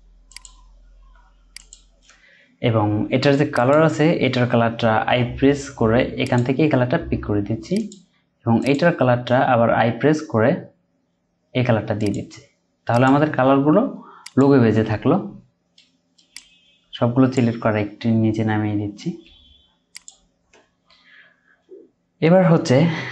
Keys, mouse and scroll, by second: 2.3-5.0 scroll up 1, 5.0 i, 5.6-6.9 scroll down 1, 9.1 scroll up 1, 9.3 i, 9.7-12.2 scroll up 1, 13.4-14.8 scroll down 1, 17.6 typing.